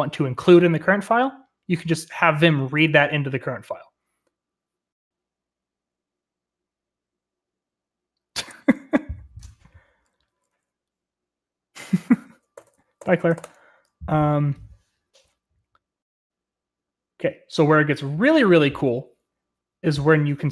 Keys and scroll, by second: 12.5-13.9 typing, 13.9 Return.